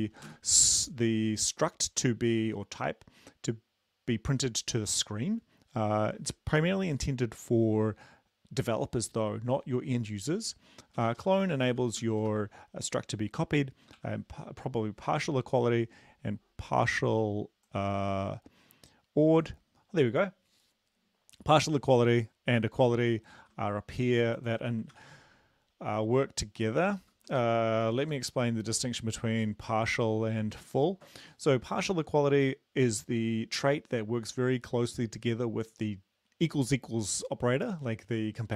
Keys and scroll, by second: 0.0-0.3 typing, 11.0-12.2 typing, 14.0-14.5 typing, 23.3 ctrl+c, 24.9 ctrl+v, 27.0 ctrl+shift+Left, 27.8 shift+Left, 28.0 shift+Left.